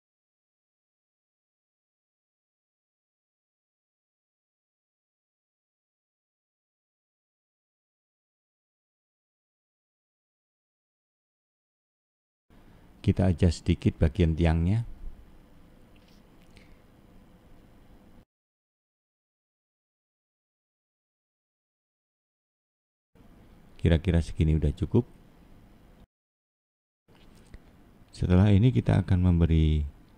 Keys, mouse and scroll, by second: 0.5-1.1 scroll up 1, 1.1 scroll up 1, 1.8 click, 5.4 shift+click, 6.5 middle click, 8.2-9.5 shift+scroll up 2, 9.5 shift+click, 10.7 shift+click, 11.8 click, 14.0 middle click, 15.1-15.6 scroll down 3, 15.6 middle click, 17.3 scroll down 4, 17.9 click, 18.4 middle click, 20.3 scroll down 1, 20.5 middle click, 24.0 click, 25.8 click, 27.3 middle click, 29.0 scroll down 2, 29.5 scroll up 1.